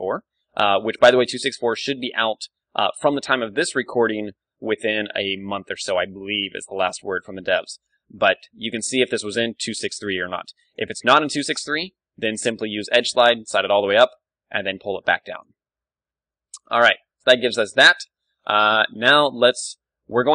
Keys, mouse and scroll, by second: 10.7-12.4 right drag, 11.8 ctrl+e, 13.6-15.4 drag, 14.0 g, 15.6 Tab, 15.6-17.1 drag, 16.5 ctrl+w, 17.1-19.9 middle drag.